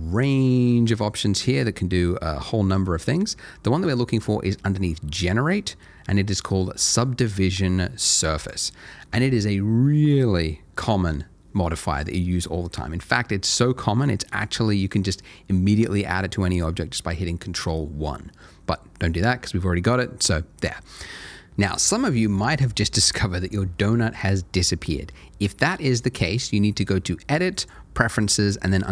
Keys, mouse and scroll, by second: 8.4 click, 21.5 click, 26.8 click.